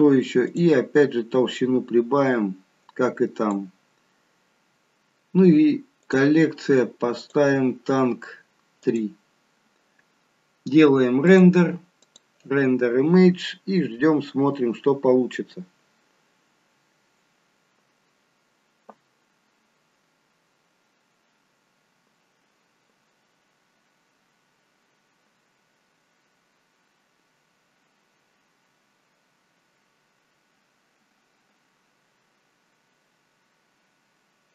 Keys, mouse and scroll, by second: 0.4 click, 1.5 click, 6.0 click, 7.2 click, 11.2 click.